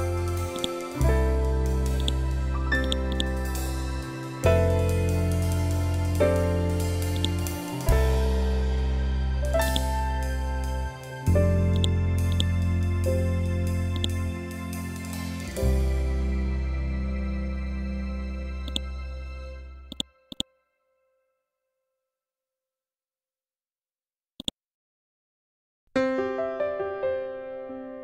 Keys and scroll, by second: 5.5 ctrl+Home.